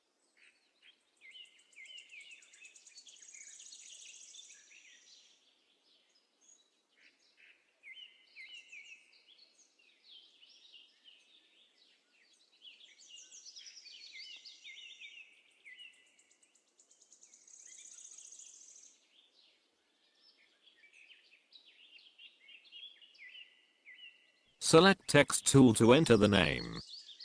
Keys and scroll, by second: 19.1 z, 23.7 z.